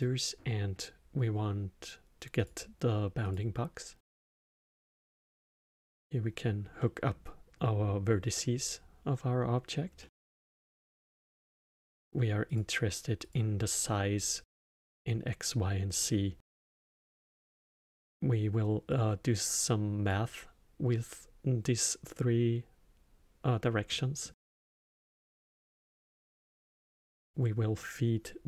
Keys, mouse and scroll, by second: 3.2 click, 4.8 drag, 6.7-9.9 middle drag, 10.0-11.6 middle drag, 11.6 click, 12.5 click, 13.2 click, 14.8-17.9 middle drag, 18.9 click, 23.8-25.1 middle drag, 25.1 shift+a.